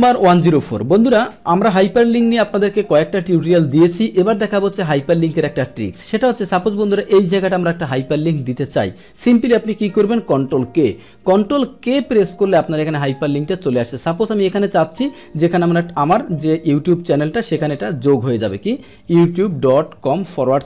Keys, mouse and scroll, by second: 5.0 click, 6.7 click, 10.8 ctrl+k, 11.1 ctrl+k, 13.0 click, 14.9 click.